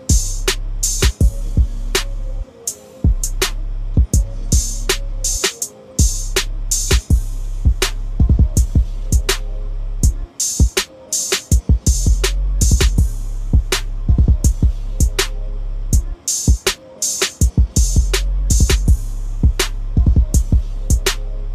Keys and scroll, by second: 13.2-16.3 typing, 18.8 ctrl+s.